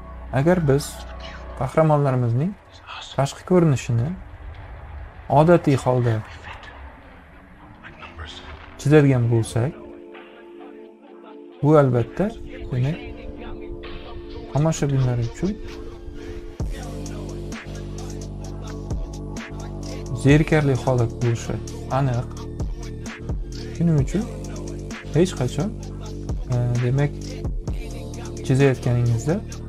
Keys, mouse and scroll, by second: 0.4 b, 3.1 click, 4.3-5.5 drag, 6.4-8.0 drag, 10.2 click, 11.1 ctrl+z, 12.6 click, 14.0-15.0 drag, 15.4 ctrl+z, 15.7-17.5 drag, 18.3 click, 19.9-23.2 drag, 23.7 click, 25.0 click, 26.3 ctrl+z, 26.5 click.